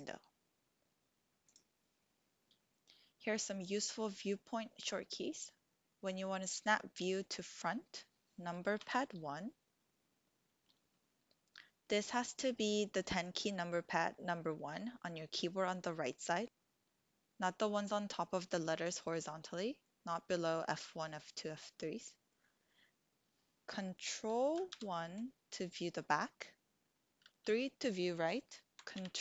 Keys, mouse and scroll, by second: 1.4 click, 8.7 KP_1, 24.7 ctrl+KP_1, 27.0 KP_3, 29.0 ctrl+KP_3.